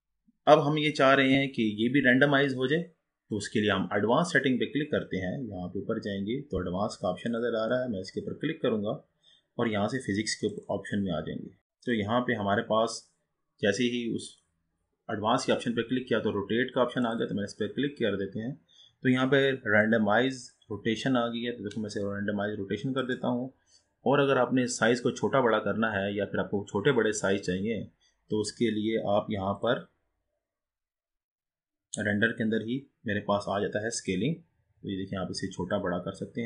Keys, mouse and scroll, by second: 5.1-6.9 scroll up 9, 7.5-9.1 drag, 9.1-10.6 scroll down 6, 10.6-11.6 drag, 11.8-14.9 drag, 15.5 click, 20.6-23.8 drag, 24.3-25.5 scroll up 4, 25.5 scroll down 3, 26.4 scroll up 3, 27.1-28.2 scroll down 2, 29.5-31.4 drag, 31.4-33.1 scroll down 6, 33.1-34.2 scroll up 2, 34.2-36.4 drag.